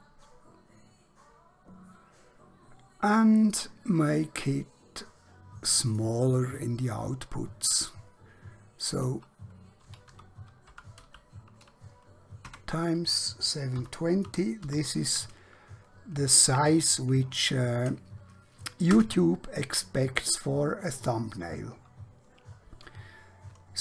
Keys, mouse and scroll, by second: 6.0 click, 8.9 click, 9.8-11.0 typing, 12.6 Tab, 13.8-14.6 typing, 19.0 Return.